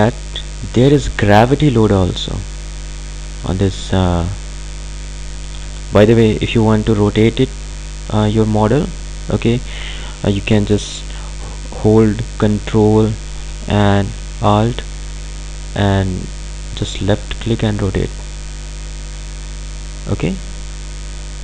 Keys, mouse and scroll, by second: 8.5-8.9 scroll up 1, 12.4 ctrl+Num_Lock, 12.4-14.1 scroll down 1, 17.3-21.4 ctrl+alt+drag.